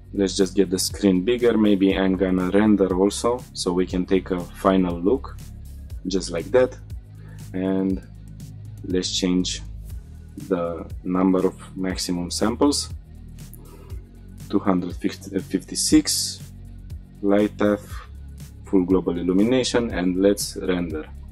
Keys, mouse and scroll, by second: 0.0 click, 0.6-1.4 scroll down 1, 1.4-1.9 drag, 2.9-3.3 scroll down 2, 4.5 drag, 5.1 middle click, 5.4 shift+middle drag, 5.6 scroll up 4, 8.4 click, 9.2-13.6 drag, 15.6-17.0 scroll down 3, 17.0 click, 17.7-18.9 drag, 21.2 click.